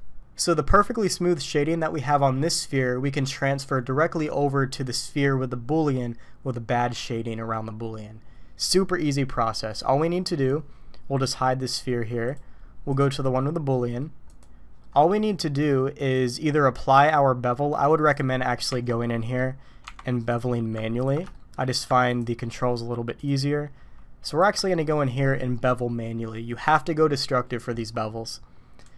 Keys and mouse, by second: 11.2 click, 12.3 right click, 12.9 click, 13.3-14.0 middle drag, 14.4 click, 16.0 click, 18.7 Tab, 19.2 click, 19.8 Tab, 21.0 ctrl+click, 21.3 shift+click, 22.1 ctrl+click, 24.8 middle click.